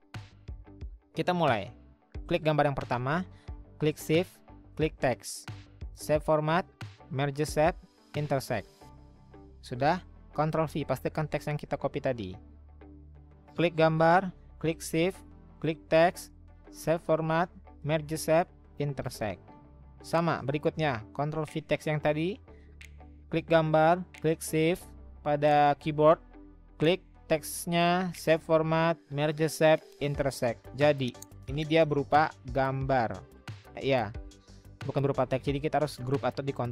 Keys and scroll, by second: 10.6 ctrl+v, 21.0 ctrl+v.